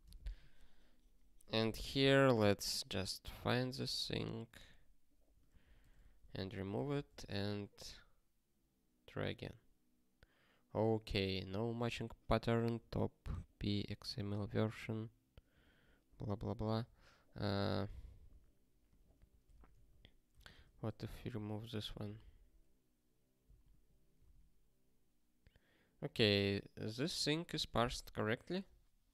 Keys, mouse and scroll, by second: 6.8 super+o, 7.3 ctrl+k, 21.0 super+o, 22.1 ctrl+k, 23.6 ctrl+/, 24.7 ctrl+k.